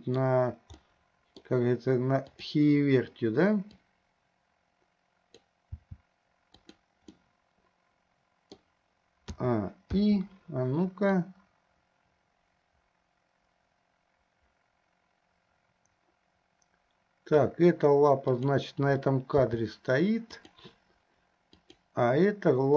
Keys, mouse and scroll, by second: 1.0 middle click, 2.5 click, 4.0-5.8 drag, 5.9 g, 7.5-8.9 middle drag, 9.6 a, 10.2 i, 11.4-17.7 drag, 18.6 click, 19.7 g, 21.8 click.